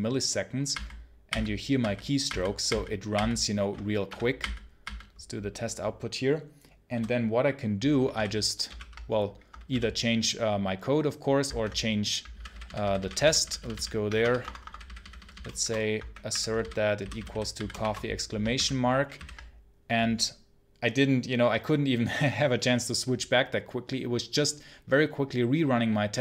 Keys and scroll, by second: 14.1 Return, 15.4 shift+0.